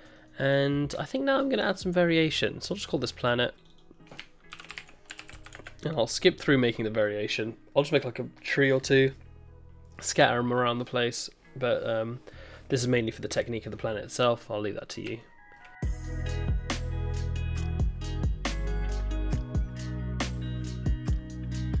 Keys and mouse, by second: 0.1-1.5 middle drag, 1.5 middle click, 3.7-6.8 drag, 8.8 click, 15.2-15.6 shift+drag, 15.8 ctrl+s, 16.4-21.8 typing, 16.8 Tab, 16.8 click, 17.0 ctrl+r, 17.3 ctrl+z, 17.4 ctrl+r, 17.6 click, 17.9 click, 18.0 click, 18.1 click, 18.2 ctrl+KP_Add, 18.3 ctrl+KP_Subtract, 18.4 ctrl+KP_Subtract, 19.0 click, 19.1 click, 19.6 click, 19.6 Tab, 19.7 click, 19.9 click, 19.9 click, 20.1 Tab, 20.1 click, 20.1 click, 20.3 click, 20.3 click, 20.5 click, 20.8 click, 21.0 click, 21.1 click, 21.2 click, 21.5 click, 21.6 click.